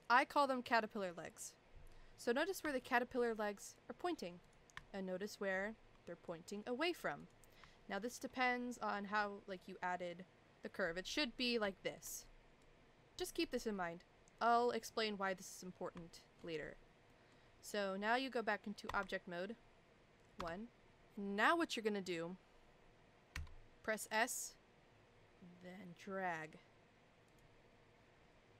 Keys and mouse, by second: 2.8 shift+middle click, 3.7 click, 4.5 click, 4.9 shift+middle click, 6.3 click, 7.9 shift+middle click, 11.7 shift+middle click, 12.8 click, 13.2 shift+middle click, 16.1 shift+middle click, 17.1 middle click, 18.9 Tab, 20.4 KP_1, 23.4 s.